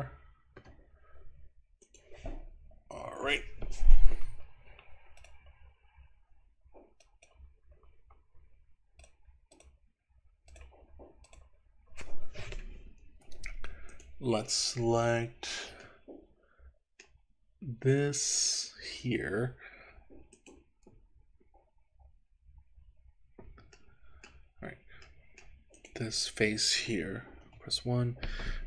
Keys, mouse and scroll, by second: 3.1 Escape, 13.9 click, 15.9-17.1 middle drag, 17.5-18.4 scroll up 2, 18.4 click, 20.3 click, 23.9 middle click, 25.1 middle click, 25.8 click, 27.4 KP_1.